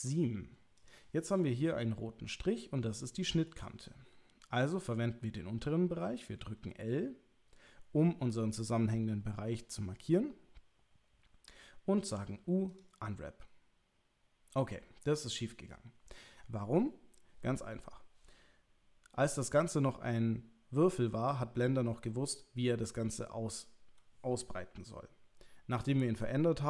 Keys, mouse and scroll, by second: 0.8 click, 1.4 middle click, 3.0 shift+middle click, 6.4 l, 12.0 u.